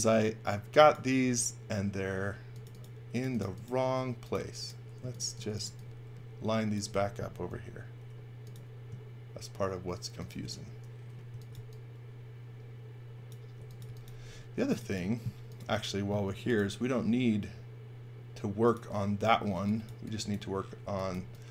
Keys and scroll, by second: 0.0-1.1 typing, 5.2-6.1 typing, 7.4 m, 11.0-12.0 typing, 13.5 x, 13.8 v, 14.2 space, 16.2 m, 19.5 x, 19.8 v, 20.7 x, 21.1 v.